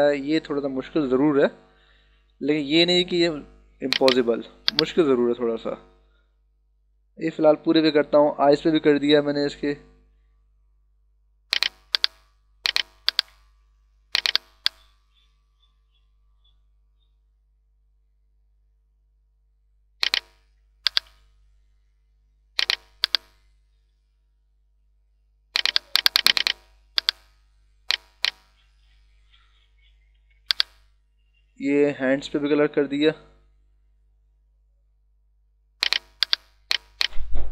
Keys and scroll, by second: 11.8 [, 20.8 ], 22.8 [, 30.1 ], 36.2 [.